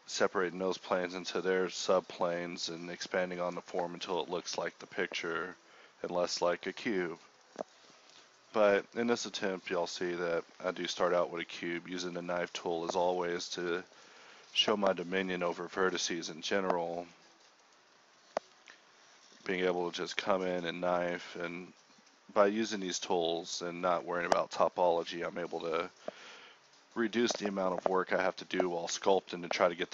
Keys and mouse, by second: 0.2 shift+r, 0.7 g, 1.4 ctrl+r, 2.3 k, 3.8 g, 4.7 alt+s, 5.5 KP_1, 7.2-9.0 typing, 10.5-15.2 typing, 11.2 Tab, 11.5 Tab, 15.0 click, 17.8-21.0 typing, 22.1-24.8 typing, 25.1 alt+s, 25.8 alt+s, 26.0 g, 26.9 g, 28.1 right click, 28.7 g, 28.9 KP_1, 29.8 right click.